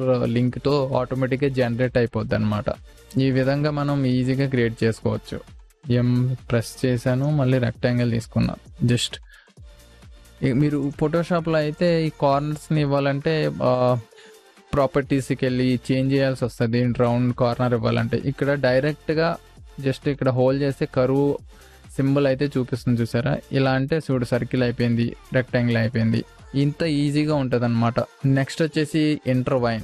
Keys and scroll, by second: 5.8 m.